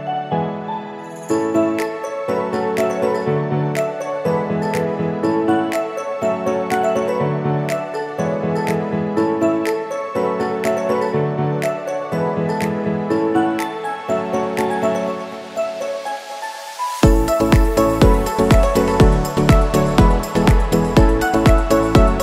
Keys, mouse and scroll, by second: 0.3-8.8 drag, 10.1 shift+Down, 12.3-17.6 drag, 18.9 shift+click, 21.5 ctrl+g.